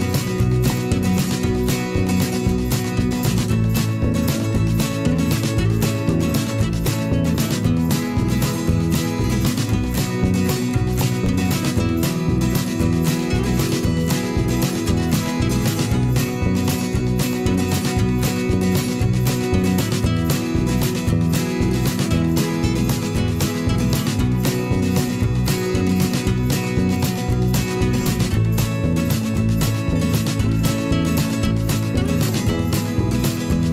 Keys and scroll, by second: 12.3 a, 15.6 v, 17.6 a, 22.3 v.